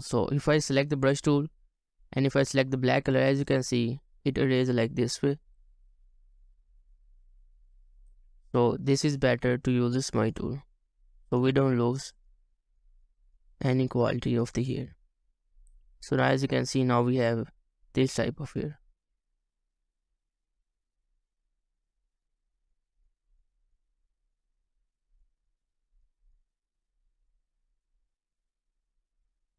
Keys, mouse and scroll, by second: 3.5 double click, 4.5 right click, 5.9 double click, 11.0 double click, 15.2-15.8 ctrl+scroll down 2, 16.5-16.9 ctrl+alt+scroll down 3, 18.3 ctrl+alt+scroll up 1, 19.6-20.1 ctrl+alt+scroll up 3, 20.1 ctrl+scroll down 1, 24.4 double click, 26.5 scroll down 1, 27.4 double click.